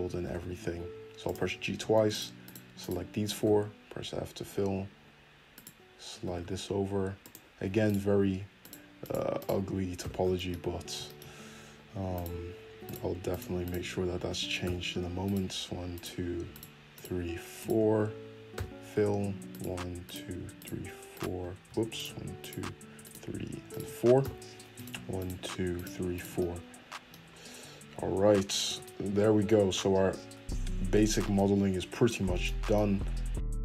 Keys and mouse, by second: 0.2 g, 2.1 shift+click, 2.2 shift+middle click, 2.4 shift+click, 2.5 shift+middle click, 2.8 shift+click, 2.8-5.5 shift+middle drag, 3.4 f, 5.5 click, 5.6-7.8 middle drag, 6.2 g, 7.8 click, 8.1 shift+middle click, 8.6 shift+click, 9.1 shift+middle click, 9.4 shift+click, 9.5-12.1 middle drag, 10.0 f, 12.1 click, 12.2-13.3 shift+middle drag, 13.3 shift+click, 13.4 shift+middle click, 13.6 shift+click, 14.1-15.2 shift+middle drag, 14.6 f, 15.2 click, 15.4 shift+middle click, 15.9 shift+click, 16.0 shift+middle click, 16.5 shift+click, 16.6 shift+middle click, 16.9 shift+click, 17.6-19.5 shift+middle drag, 18.5 f, 19.5 click, 19.6 shift+middle click, 20.0 shift+click, 20.1 shift+middle click, 20.5 shift+click, 20.6 shift+middle click, 21.1 shift+click, 21.2 shift+middle click, 21.9 click, 22.0 shift+middle click, 22.4 shift+click, 22.5 shift+middle click, 23.0 shift+click, 23.1 shift+middle click, 23.7 shift+click, 23.7-24.7 shift+middle drag, 24.2 f, 24.7 click, 24.8 shift+middle click, 25.2 shift+click, 25.8 shift+middle click, 26.1 shift+click, 26.2 shift+middle click, 27.2-28.6 middle drag, 28.3 f, 28.6 Tab, 30.2-33.6 middle drag.